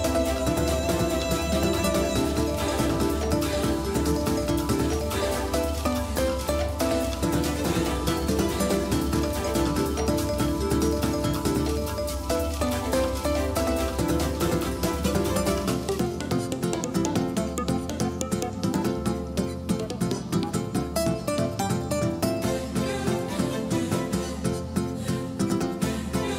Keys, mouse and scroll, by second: 10.7-15.6 drag, 17.5-20.2 drag, 26.2-26.3 drag.